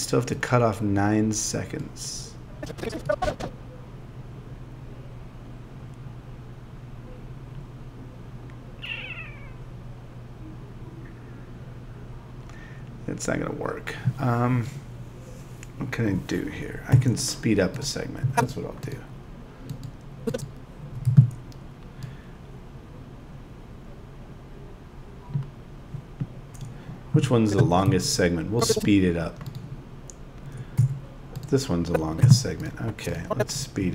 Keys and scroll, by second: 16.9 z, 27.6 z, 32.2 z.